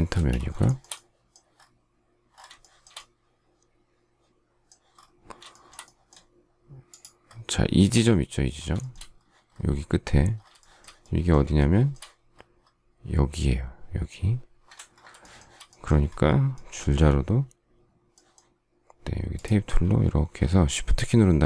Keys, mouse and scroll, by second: 0.0 space, 0.6 shift+middle click, 2.6 shift+middle click, 5.4 shift+middle click, 8.7 shift+middle click, 10.5 shift+middle click, 11.5 shift+middle click, 15.1 shift+middle click, 16.9 t, 20.3 shift+scroll.